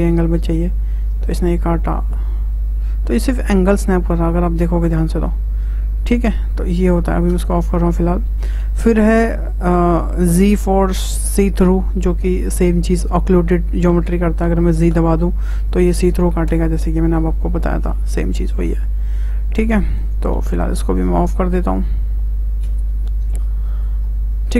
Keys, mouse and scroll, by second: 16.8-20.3 middle drag, 20.3 z, 21.7-23.8 drag, 24.4 `.